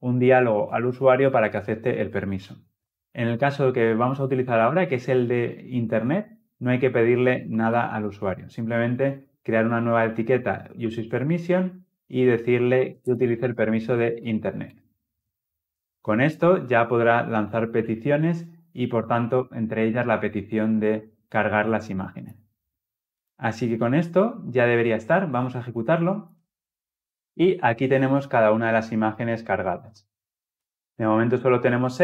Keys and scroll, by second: 10.7 Return, 26.0 shift+F10.